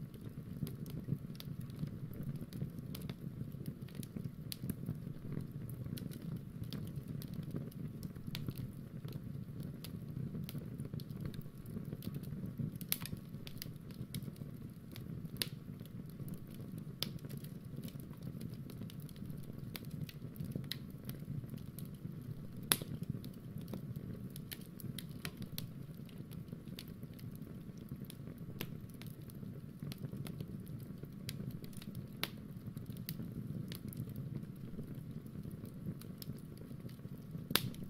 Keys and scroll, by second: 5.1 super+Tab.